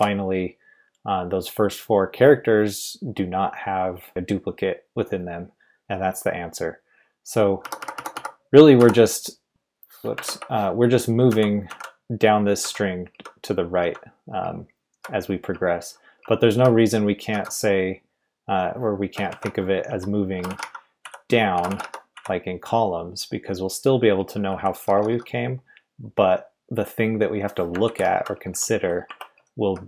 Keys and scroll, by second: 7.6-9.5 typing, 10.2 ctrl+r, 11.3-11.7 typing, 14.4-17.3 typing, 18.9-22.6 typing, 23.9-25.6 typing, 27.8 ctrl+v, 28.1-29.8 typing, 29.0 Escape.